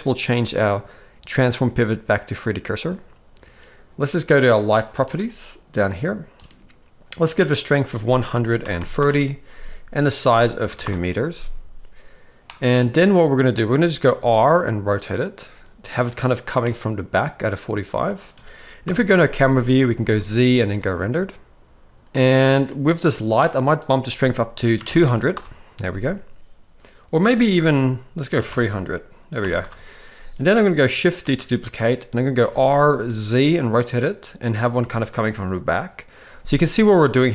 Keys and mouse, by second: 0.6-2.4 drag, 5.9 click, 7.9-9.0 drag, 10.3 click, 12.5-13.5 middle drag, 14.1 r, 16.6-18.1 middle drag, 18.8 KP_0, 20.0 z, 22.0 ctrl+b, 22.5 click, 23.8-25.3 drag, 25.0 0, 27.2-29.7 drag, 31.3 shift+d.